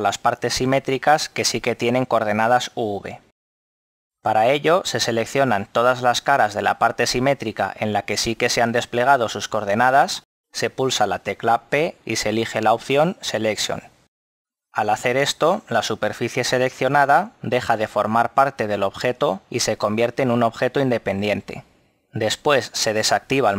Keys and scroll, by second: 11.6 p.